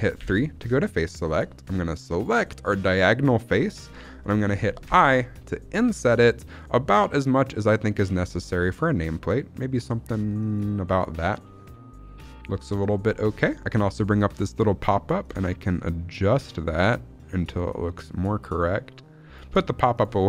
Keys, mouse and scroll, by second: 0.1 3, 2.0 click, 4.7 i, 10.3 click, 13.7 click, 15.1-19.3 shift+drag, 19.8 click.